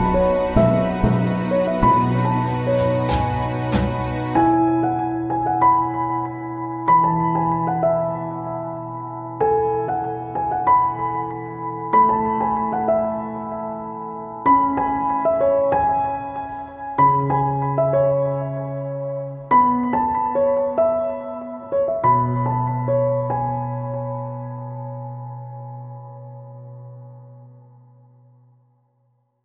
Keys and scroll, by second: 2.5 shift+super+e, 4.7 b, 6.2 super+z.